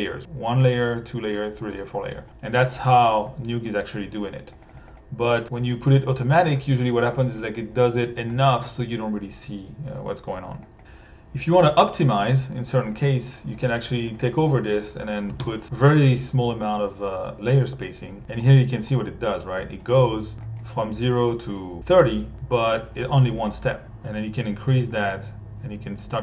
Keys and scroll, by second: 4.7 1, 15.3 2, 15.4 Home.